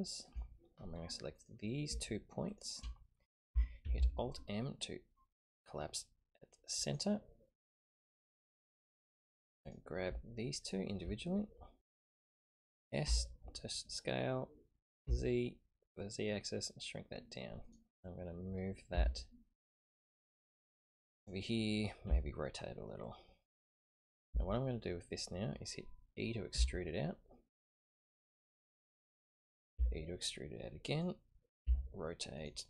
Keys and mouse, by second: 1.3 click, 2.5 shift+click, 3.8 alt+m, 9.6 click, 10.6 shift+click, 13.0 s, 18.9 g, 23.4 r, 26.5 e, 29.7 e, 31.6 r.